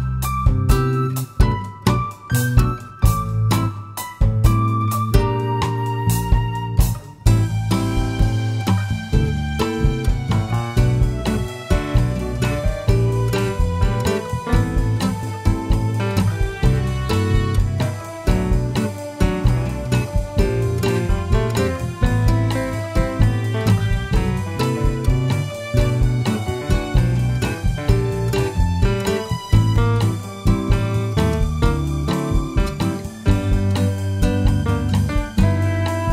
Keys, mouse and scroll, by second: 0.5 scroll up 1, 0.7 shift+a, 2.4 scroll down 1, 2.6-4.4 middle drag, 3.4 g, 4.4 click, 4.6 s, 5.7 click, 5.9 scroll up 1, 6.4 middle click, 7.4 s, 7.9 click, 9.9 shift+z, 10.9 shift+middle click, 11.9 s, 13.1 click, 13.4 g, 14.4 click, 14.7 shift+middle click, 15.3 g, 16.1 click, 16.4 s, 18.4 click, 18.5 g, 19.3 click, 20.4-21.9 middle drag, 21.9 shift+z, 23.9 s, 25.5 click, 25.7 `, 26.9-27.6 shift+middle drag, 27.6 g, 28.8 click, 29.0-29.5 scroll up 2, 29.5-30.1 shift+middle drag, 30.1 scroll up 1, 30.9 s, 33.4 click, 33.5 g.